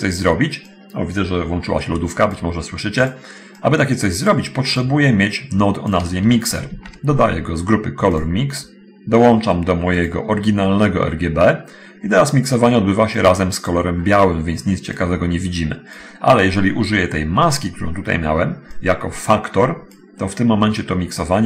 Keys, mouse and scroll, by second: 0.8 click, 3.3 click, 3.5-4.7 drag, 5.6 click, 6.9 shift+a, 8.3 click, 10.2 click, 13.4 click, 13.7-14.3 scroll up 1, 15.2-16.3 drag, 19.0-20.0 drag.